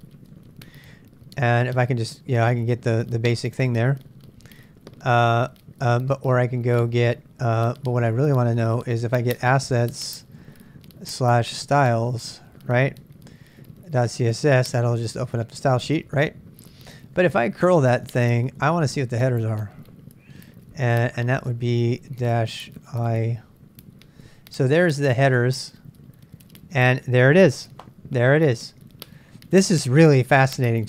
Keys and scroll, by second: 0.0-2.1 typing, 3.2-7.5 typing, 9.0-10.0 typing, 11.0-12.5 typing, 13.6-15.0 typing, 16.3-21.6 typing, 23.3 typing.